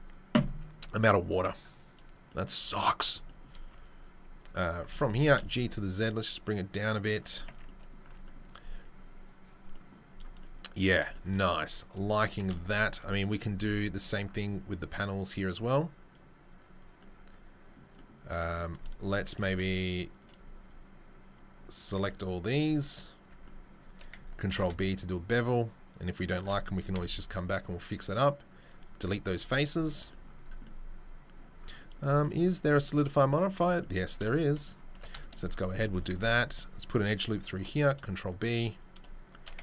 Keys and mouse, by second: 3.7 Tab, 4.7 a, 5.0 g, 7.5 Tab, 11.8 click, 11.9-20.3 middle drag, 13.6 ctrl+r, 21.9 shift+middle click, 23.3 shift+middle click, 24.1 ctrl+click, 24.5 ctrl+b, 24.6-30.3 shift+middle drag, 26.9 Delete, 29.3 z, 29.9 Tab, 30.3 right click, 30.4-38.7 middle drag, 34.9 Tab, 36.2 ctrl+r, 37.5 ctrl+b, 38.7 alt+right click, 38.8 alt+middle click, 39.4 ctrl+alt+middle click.